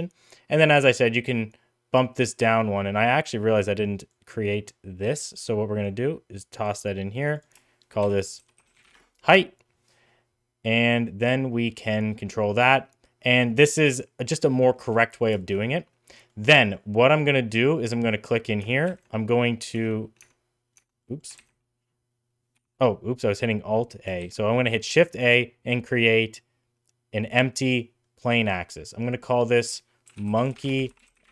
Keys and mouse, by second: 4.1-5.1 drag, 5.8-6.7 drag, 7.2 click, 7.3-9.5 drag, 11.0-12.7 drag, 13.8 middle click, 14.2 middle click, 14.8 middle click, 15.4 shift+middle click, 16.1 middle drag, 16.6 middle drag, 18.9 ctrl+a, 20.4 Tab, 20.8 Tab, 21.0 middle drag, 21.4 ctrl+a, 24.2 shift+a, 28.3 middle click, 29.4-31.3 drag.